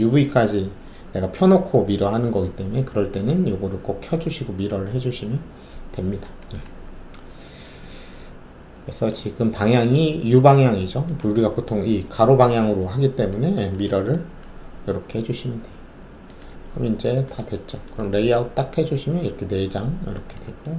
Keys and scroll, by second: 18.1 alt+z.